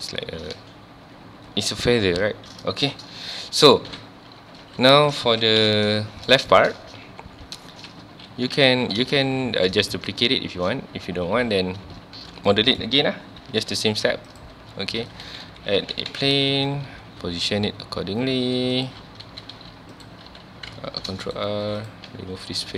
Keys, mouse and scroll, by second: 3.9 /, 4.6 scroll down 1, 4.8 alt+a, 5.2 ctrl+s, 5.6 KP_1, 6.1-6.5 scroll down 1, 6.5 shift+middle click, 6.8-7.1 scroll up 1, 7.1 ctrl+s, 7.5-7.8 scroll down 1, 8.3 alt+h, 8.7 alt+a, 9.1 ctrl+s, 10.4-11.2 scroll up 1, 12.5-13.5 shift+middle drag, 13.5 shift+a, 14.7-15.1 scroll down 1, 15.1 r, 16.2 KP_Enter, 16.7-17.0 scroll up 1, 17.2 g, 18.9 click, 19.0 scroll down 1, 19.2 Tab, 19.5 1, 19.9 click, 20.3 z, 20.9 ctrl+r, 21.2 click, 21.4 right click, 21.6 3, 21.8 click, 22.1 x.